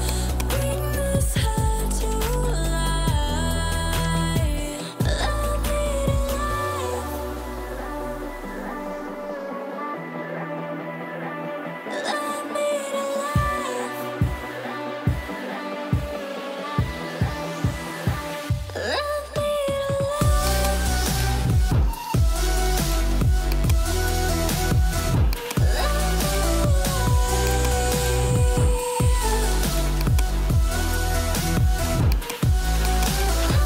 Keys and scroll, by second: 17.9 0.